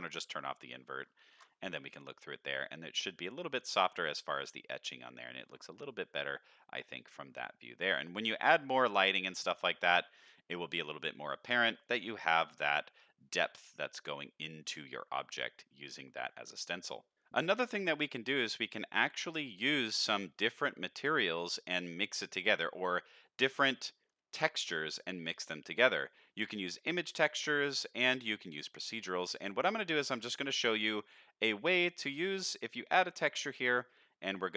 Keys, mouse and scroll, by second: 0.5 middle click, 1.3 ctrl+shift+click, 2.0 scroll up 1, 2.2-5.5 middle drag, 5.6-6.4 scroll up 2, 6.4 middle click, 7.7-8.4 scroll down 3, 8.1 middle click, 8.9 shift+middle drag, 9.3 middle click, 10.7 middle click, 11.5 middle click, 11.9 scroll up 1, 14.6 middle click, 15.3 middle drag, 15.9 middle drag, 17.2-17.5 middle drag, 18.5 middle click, 19.0 middle click, 19.5 middle click, 19.9 middle click, 20.7 click, 21.6 middle click, 23.0 middle click, 23.5 shift+middle click, 25.5 middle click, 26.0 middle click, 27.9-28.3 middle drag, 28.7-29.4 middle drag, 30.0 shift+a.